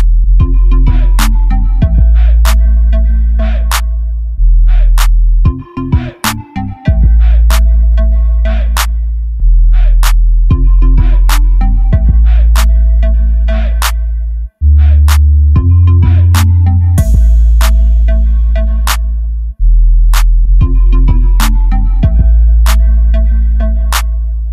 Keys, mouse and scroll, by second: 5.3-7.2 drag, 10.3-11.6 drag, 12.4 click, 13.1-15.0 middle drag, 15.0 click, 16.8 KP_0, 18.4-19.7 drag.